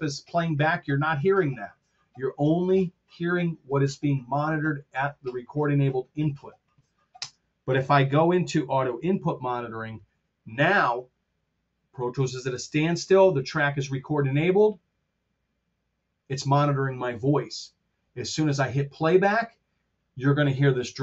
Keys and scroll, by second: 7.1 space, 9.4 alt+k.